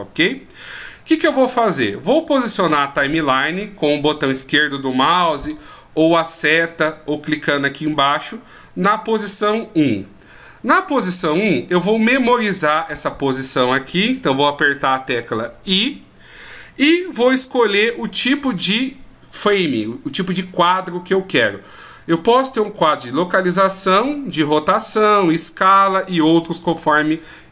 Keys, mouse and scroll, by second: 15.7 i.